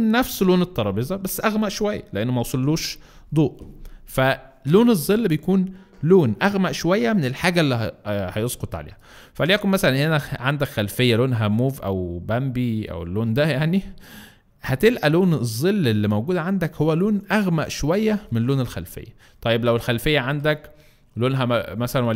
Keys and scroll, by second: 9.0 space.